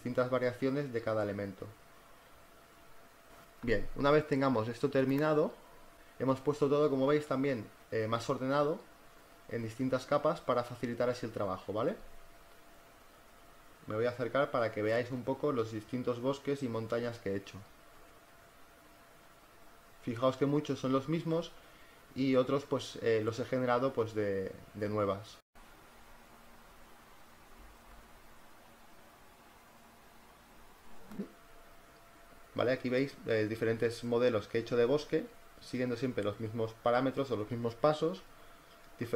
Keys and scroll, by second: 13.8 z, 17.2 space.